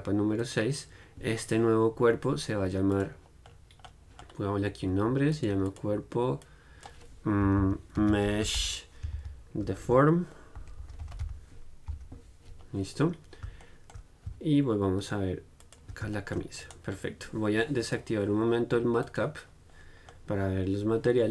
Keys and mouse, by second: 3.3-13.3 drag, 13.3-15.7 middle drag, 15.8-18.7 drag, 18.7 right click, 19.3-21.3 drag.